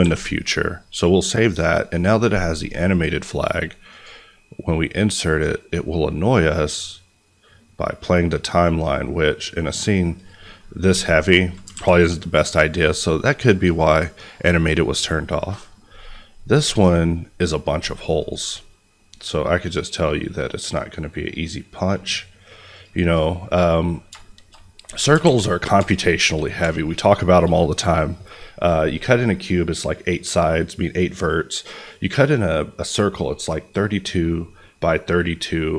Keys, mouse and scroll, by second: 1.8 click, 10.8 s, 11.5 click, 11.7 alt+a, 12.4 middle click, 13.6 click, 15.8-18.1 scroll up 1, 18.1 click, 23.4-24.2 scroll up 1, 24.2 middle click, 24.5 scroll up 1, 25.2 alt+a, 25.5 scroll down 1, 25.9-27.4 shift+middle drag.